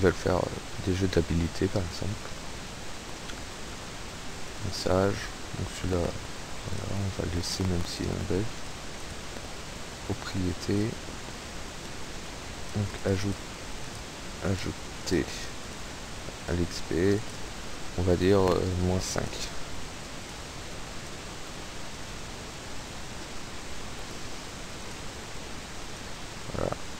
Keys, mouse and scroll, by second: 0.7 scroll up 2, 2.3 click, 4.5 click, 6.7 click, 7.5 click, 8.6 click, 9.0 click, 10.8 click, 12.3 click, 12.8 click, 13.9 click, 14.5 click, 15.1 click, 15.7 click, 16.5 click, 17.3 click, 18.3 -, 18.8 KP_5, 19.2 click, 20.3 click, 22.0 click, 24.1-24.5 scroll down 1, 24.8 click, 25.9 click.